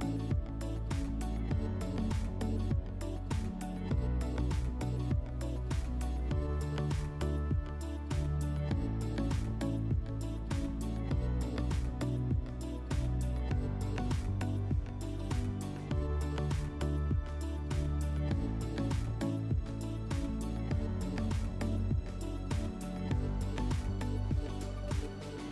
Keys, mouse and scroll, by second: 0.4 click, 0.6 click, 12.3 click, 17.3 click, 20.5 click, 22.3 click, 22.8 click.